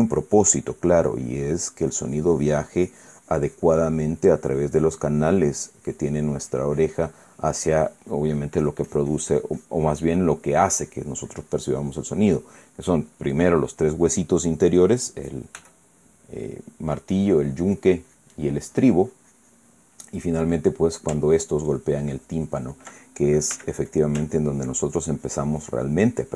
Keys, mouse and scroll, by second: 11.5-13.2 drag, 16.3 f, 17.0 click, 17.7-20.5 drag, 20.9 middle click, 22.1-23.6 ctrl+drag, 24.2 f, 24.6 click, 25.0-26.3 ctrl+drag.